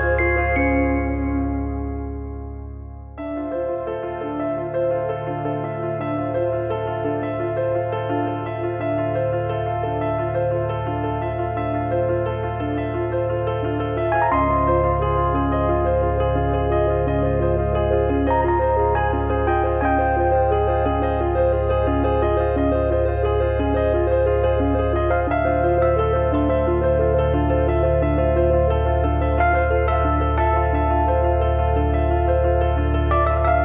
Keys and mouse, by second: 1.7 click, 3.3 click, 4.0 click, 5.5 click, 9.0 click, 11.2 click, 15.2 click, 23.4 middle click, 26.4 middle click, 27.1 middle click, 29.2 Tab, 29.5 middle click, 29.7 click, 30.8 shift+h, 31.0 middle click, 31.7 middle click, 32.0 middle click, 32.4 middle click, 32.6 shift+middle click.